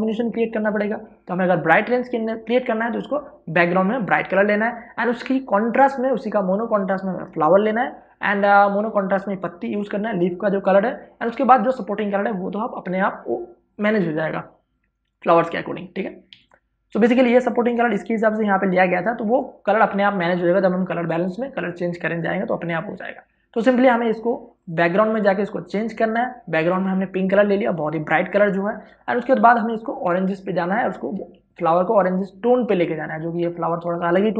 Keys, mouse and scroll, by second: 17.0 v, 25.2 click, 32.0 space, 32.2-34.3 ctrl+drag.